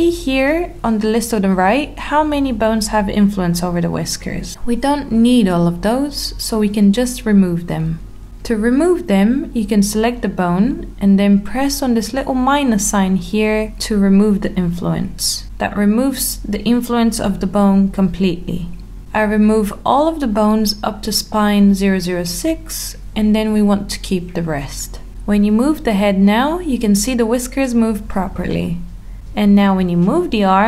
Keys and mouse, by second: 0.3 middle click, 5.7 click, 7.0 click, 7.5 click, 8.3 click, 8.5 click, 8.6 click, 9.1 click, 10.8 click, 11.1 click, 11.6 click, 12.0 click, 12.3 click, 12.5 click, 12.7 click, 12.9 click, 13.2 click, 13.4 click, 13.6 click, 13.8 click, 14.8 click, 15.5 click, 16.3 click, 16.9 click, 17.7 click, 17.9 click, 18.1 click, 18.3 click, 18.5 click, 18.7 click, 19.0 click, 19.3 click, 19.6 click, 20.7 click, 21.2 click, 21.4 click, 21.6 click, 22.2 click, 22.5 click, 22.7 click, 23.2 click, 25.0 middle click, 26.0 Tab, 28.7 r.